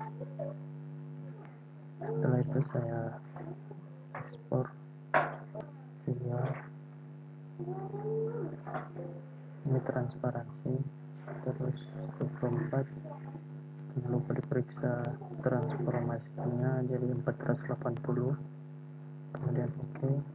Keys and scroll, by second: 4.5 ctrl+e.